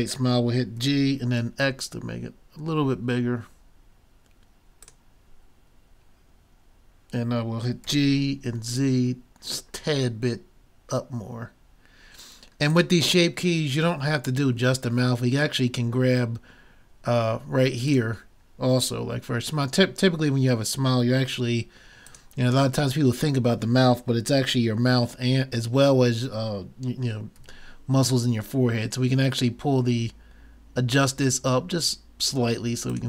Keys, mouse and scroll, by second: 0.8 g, 7.9 g, 13.7-17.7 middle drag, 17.9-19.7 drag, 20.2-21.9 middle drag, 22.1-24.0 drag, 24.0 middle click, 27.3 g.